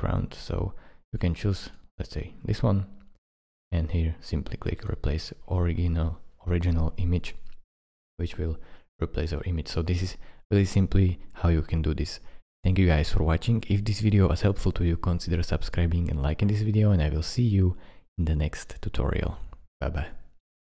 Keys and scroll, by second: 20.7 -.